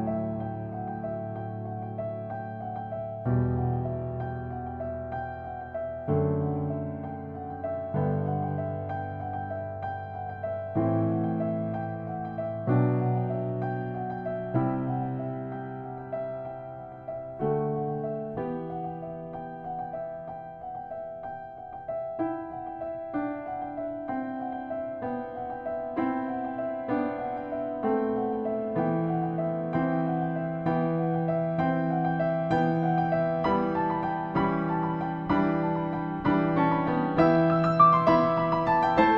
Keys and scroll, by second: 10.2 alt+0, 11.7-12.5 typing, 20.4 -, 29.8 t, 31.5-32.3 typing, 33.3 Return.